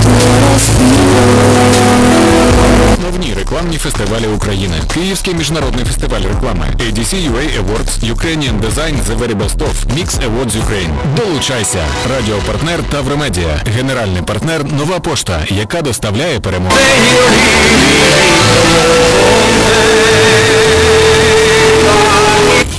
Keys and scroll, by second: 3.0 Page_Down, 22.7 alt+s.